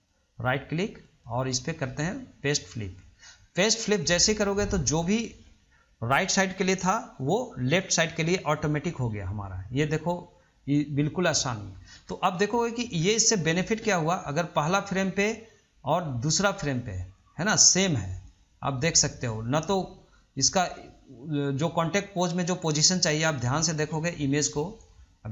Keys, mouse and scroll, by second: 1.2-4.2 right drag, 9.3-12.4 middle drag, 12.5-14.6 shift+middle drag, 14.6-17.6 drag.